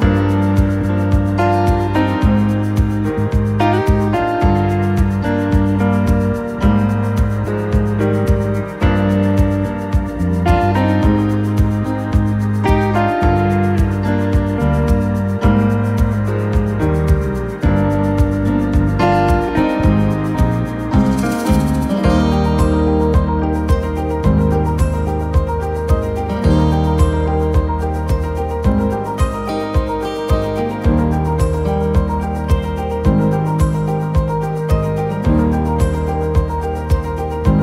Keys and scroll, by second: 0.3 r, 3.1 p, 8.5-9.3 typing, 14.1 p, 15.5 6, 15.9 Return, 16.9 Escape, 22.1 t, 24.7-26.3 typing, 31.8 Escape, 32.6 ctrl+z, 35.6 9, 35.9 Return.